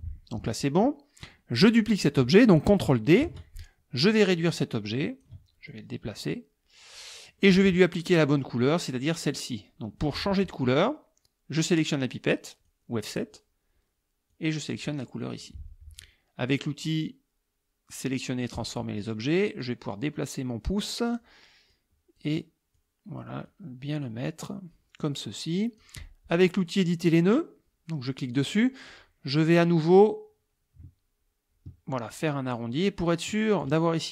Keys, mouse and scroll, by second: 1.3 click, 3.3 ctrl+d, 4.1-5.5 ctrl+drag, 5.7-7.2 ctrl+drag, 7.4-8.6 drag, 12.7 click, 14.3 click, 15.1 click, 18.6 click, 19.6-21.3 drag, 21.7 click, 22.8-23.4 drag, 23.5 click, 28.1 click, 30.0-33.8 drag.